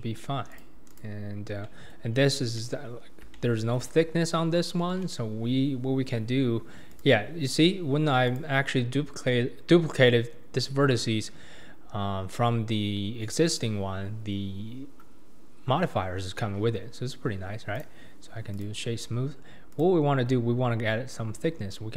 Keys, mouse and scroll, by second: 0.0 Tab, 0.5 click, 0.9 click, 1.6-2.1 middle drag, 2.1-2.6 scroll down 7, 2.6-2.9 middle drag, 2.9-3.3 scroll up 4, 3.3-6.4 shift+middle drag, 6.9 click, 7.5-8.3 scroll down 4, 8.3 click, 9.3-11.3 scroll up 2, 11.3 scroll up 1, 17.2-17.7 scroll up 2, 17.7-19.7 right drag, 19.7-21.9 drag.